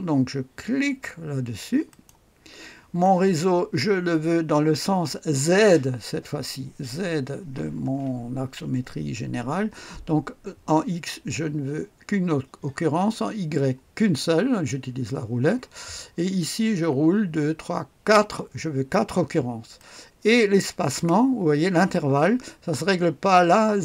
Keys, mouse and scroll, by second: 1.9 click, 11.0-11.5 scroll down 1, 13.2-14.1 scroll down 1, 16.7-17.8 scroll up 1, 17.8-19.8 scroll up 1, 19.8-21.0 drag.